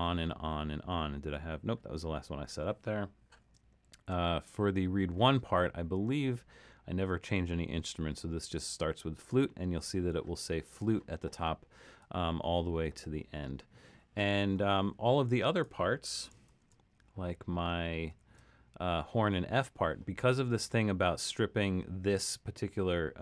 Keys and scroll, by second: 3.9 alt+super+,, 16.5 alt+super+..